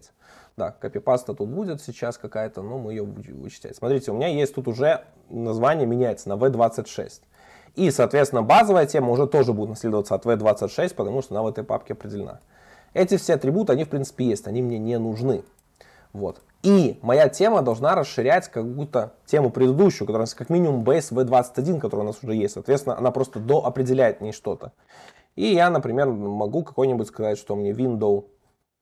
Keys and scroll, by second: 7.6 alt+Up, 8.0 super+c, 9.3 alt+Up, 9.9 super+v, 13.8 super+BackSpace, 16.6 alt+Up, 17.2 super+c, 17.7 alt+Up, 19.2 super+v, 21.9 Escape, 26.1 Return.